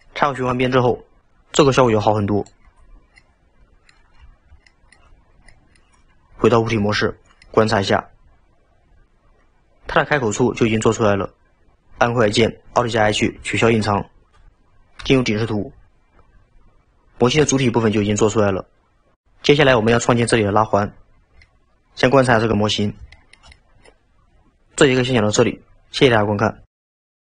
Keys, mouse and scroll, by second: 0.4-1.2 scroll down 2, 3.0 scroll down 4, 3.2-5.2 middle drag, 5.2-5.6 scroll up 2, 5.6-6.9 middle drag, 6.9 Tab, 7.2 scroll down 2, 7.5-9.9 middle drag, 14.4 alt+h, 15.0 KP_7, 16.1-16.9 scroll down 2, 18.2-20.8 scroll down 1, 20.8-21.5 scroll down 2, 21.5-24.6 middle drag.